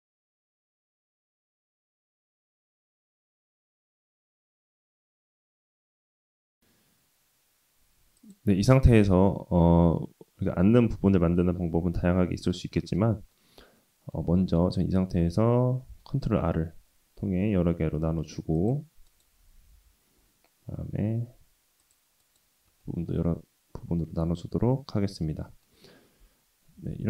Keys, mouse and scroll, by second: 0.2 middle drag, 0.6 s, 1.5 middle click, 3.3 s, 3.9-4.4 middle drag, 4.7 middle drag, 5.1-6.2 scroll up 2, 6.5 s, 8.7-10.1 middle drag, 11.1 g, 12.8-13.4 middle drag, 13.8-14.2 middle drag, 14.3 Tab, 16.4 ctrl+r, 22.8-25.7 middle drag, 26.9 ctrl+z.